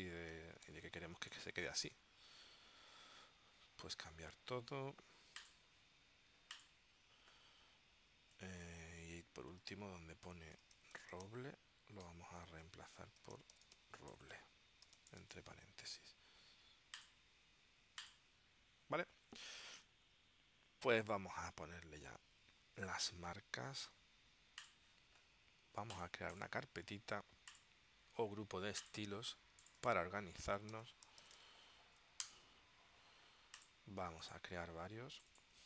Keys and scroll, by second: 0.0-1.6 typing, 10.5-15.8 typing, 12.2 Tab, 30.5-32.2 typing, 32.4 Return.